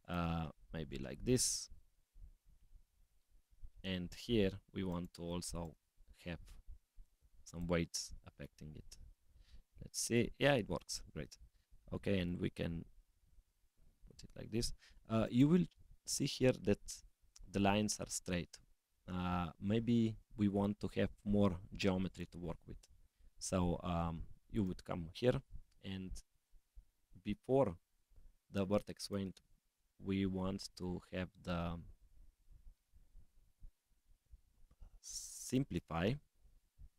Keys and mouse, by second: 4.9 click, 6.9 click, 7.4 click, 8.7 g, 11.1 s, 14.1 g, 20.7 g, 24.6 click, 29.0-35.6 drag, 36.5 click.